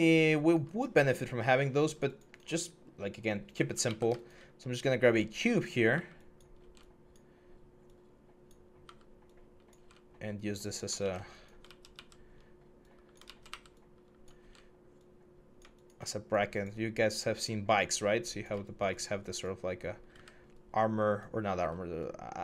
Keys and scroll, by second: 3.6 w, 5.1 w, 5.7 r, 5.7 w, 8.6-9.5 typing, 10.8 ctrl+z, 10.8 ctrl+x, 11.4 ctrl+z, 11.7 ctrl+z, 13.1 ctrl+z, 13.3-14.2 typing, 19.9 w.